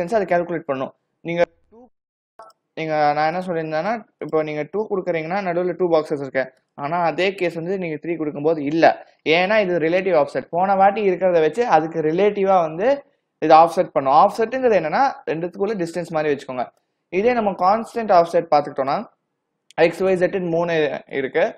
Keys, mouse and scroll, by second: 2.1 click, 2.5 click, 3.9 click, 4.3 click, 6.7 click, 15.4 click, 18.1 click, 18.9 click, 21.2 click.